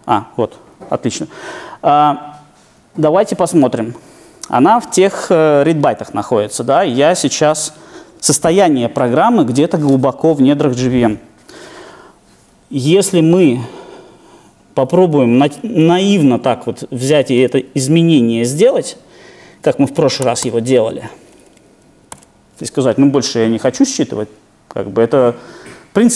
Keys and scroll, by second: 15.8 super+e, 20.2 super+/.